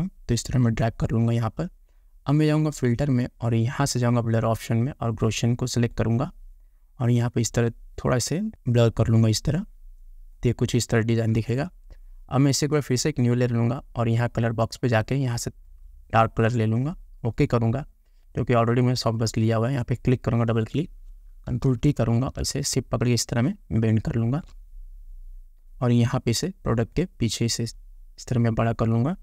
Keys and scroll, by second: 21.8 ctrl+t.